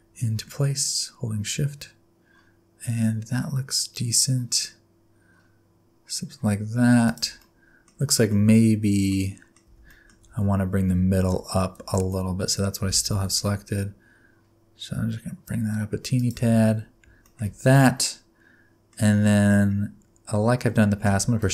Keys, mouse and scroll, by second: 7.4 middle click, 8.2 middle click, 8.4 Tab, 9.1 middle click, 9.7 Tab, 9.9 middle click, 10.3 alt+z, 10.7 scroll up 4, 11.0 Tab, 11.8 alt+z, 12.8 g, 16.5 Tab, 16.7-17.2 scroll down 5, 17.2 shift+middle click, 17.8 middle click, 18.9 scroll down 1, 19.2 middle click.